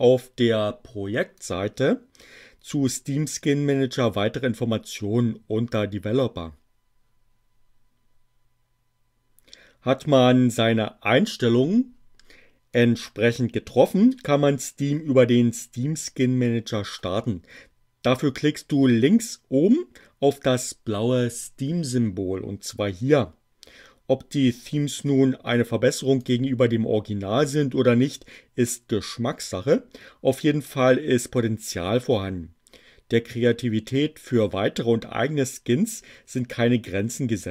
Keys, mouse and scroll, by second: 1.5 click, 12.8 click, 26.1 click.